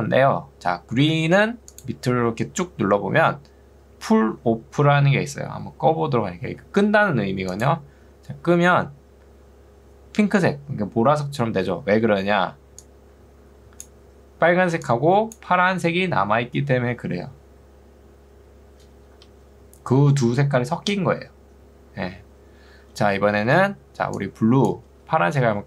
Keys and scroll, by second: 12.2 ctrl+2, 19.2 Escape, 23.6 2, 25.2 Escape.